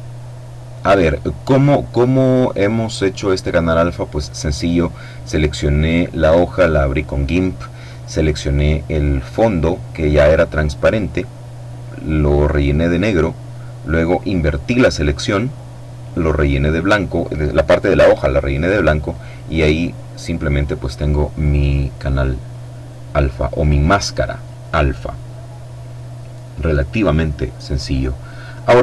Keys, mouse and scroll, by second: 18.5 click, 21.7-24.4 drag, 27.2-28.8 drag.